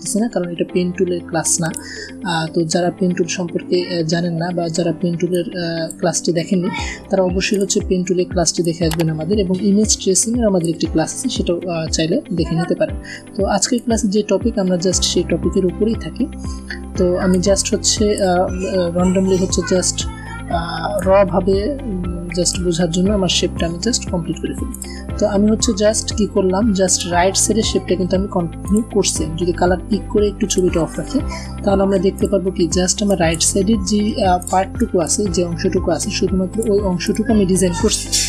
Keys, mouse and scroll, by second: 5.2-5.8 drag, 12.2 alt+click, 14.0-14.9 click, 15.1-15.5 alt+scroll up 1, 17.2-18.1 ctrl+drag, 20.9-22.4 alt+drag, 25.0-25.4 alt+scroll down 1, 26.8 click, 28.4 click, 31.6 v, 32.0 click, 33.9 a, 34.2 click, 36.6 a, 36.8 click, 37.7 v.